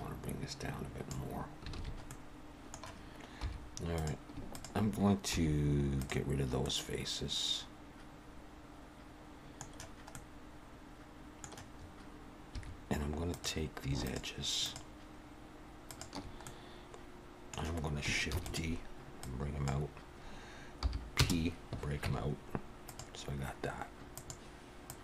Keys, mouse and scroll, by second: 1.7 alt+a, 2.1 middle click, 3.4 3, 3.9 click, 4.5 shift+click, 5.3 x, 6.7 middle click, 10.1 middle click, 12.5 2, 13.3 click, 14.0 shift+click, 15.1 click, 15.9 click, 16.4 middle click, 18.3 shift+d, 19.2 click, 20.8 p, 22.0 Tab, 22.8 click, 24.1 click.